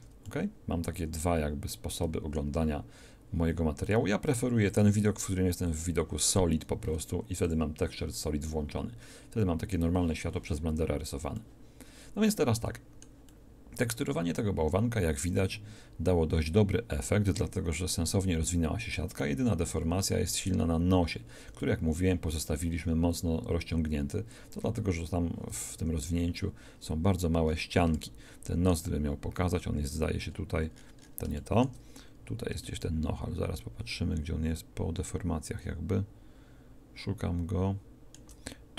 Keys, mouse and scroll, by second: 11.5 middle click, 19.6 middle click, 25.7 Tab.